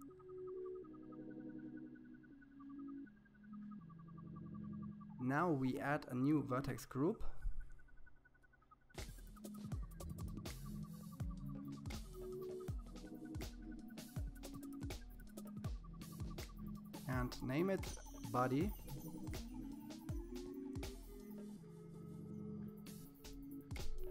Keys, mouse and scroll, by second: 1.9-3.5 shift+middle drag, 4.5 click, 5.6-6.7 scroll up 16, 7.1 scroll down 6, 7.3-8.5 scroll up 7, 8.5-10.5 drag, 10.5 scroll down 6, 10.7 click, 13.3-15.1 drag, 16.9 click, 23.3-24.1 scroll up 31.